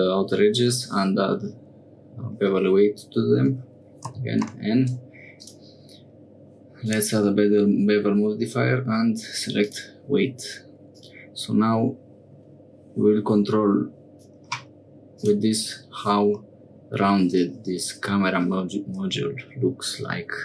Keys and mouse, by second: 4.4 n, 5.4-6.9 drag, 9.6 click, 10.9-14.2 drag, 15.1 click, 16.4 middle click.